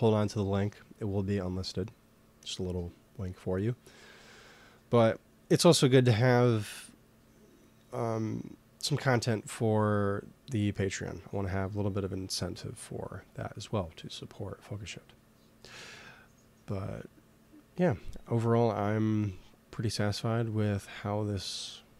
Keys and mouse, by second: 19.1-20.9 middle drag.